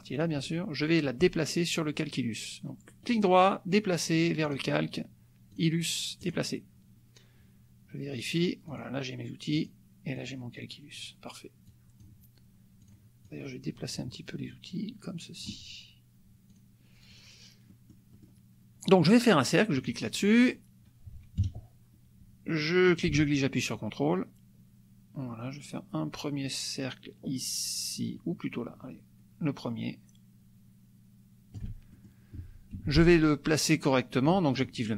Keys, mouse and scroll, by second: 0.2 shift+click, 3.0 right click, 4.4 right click, 5.6-6.5 drag, 8.2 click, 9.7 click, 10.3 click, 11.8 click, 12.9 drag, 13.4-14.2 drag, 14.5-15.7 drag, 16.6 click, 17.1 click, 17.8 click, 18.2 click, 19.8 click, 21.4 KP_Subtract, 22.9-31.8 ctrl+shift+drag, 32.0 ctrl+shift+click, 32.8 F1, 34.5 click.